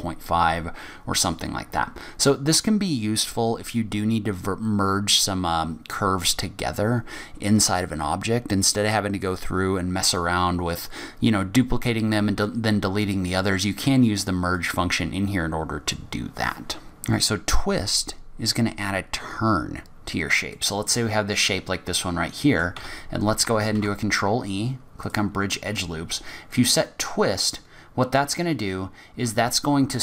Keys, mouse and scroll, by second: 14.5 click, 16.8-17.2 scroll up 1, 20.7 middle click, 22.9 a, 23.9 ctrl+e, 27.7 click.